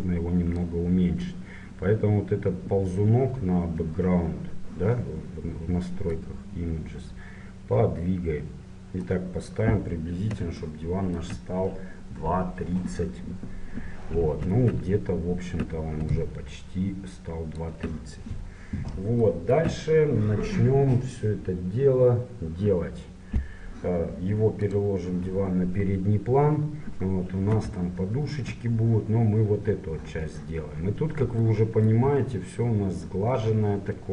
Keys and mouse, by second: 0.7-2.7 drag, 6.2-8.0 drag, 16.1-18.1 drag, 18.1 middle click, 22.0-23.4 middle drag, 24.6-27.1 drag, 28.3 middle click.